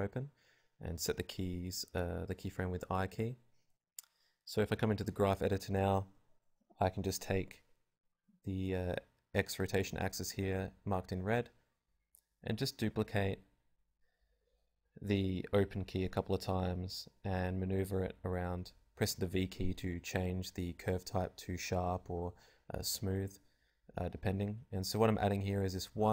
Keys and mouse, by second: 0.4 shift+d, 2.5-4.5 drag, 3.1 g, 4.5 v, 5.7 shift+d, 6.2-7.8 drag, 6.3 r, 6.9 g, 8.5-9.7 drag, 11.6 click, 11.7 r, 12.2 click, 13.0 g, 15.4 g, 16.5-18.4 drag, 17.7 alt+a, 19.2 shift+Left, 20.0 alt+a, 21.9-26.1 drag, 22.9 e, 24.2 alt+a.